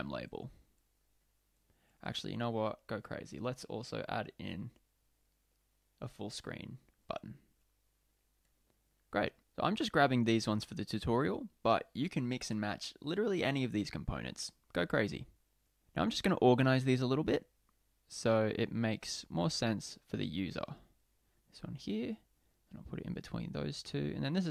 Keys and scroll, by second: 1.7 super+v, 8.6 super+v, 19.3 Left.